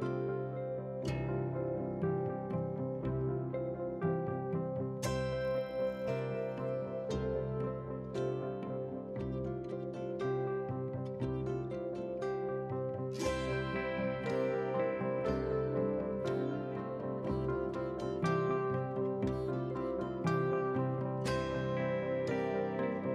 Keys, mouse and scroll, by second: 1.4 KP_7, 2.0 KP_7, 2.3 KP_Decimal, 2.6-2.9 scroll up 1, 3.0 click, 3.4 shift+click, 3.9 s, 6.1 ctrl+z, 6.3 ctrl+z, 6.6 ctrl+z, 6.9 g, 7.9 click, 8.2 g, 9.4 3, 9.6 click, 10.2 KP_1, 11.0 click, 11.2 shift+middle click, 11.6 e, 13.6 click, 13.9 middle click, 14.3 shift+middle click, 14.5 scroll down 2, 14.7 middle click, 15.0 click, 15.3 middle click, 15.5 shift+middle drag, 17.5 click, 18.5 click, 18.8 click, 19.5 click, 20.3-21.0 scroll down 7, 21.0-22.6 scroll up 9, 22.8-23.1 scroll up 1.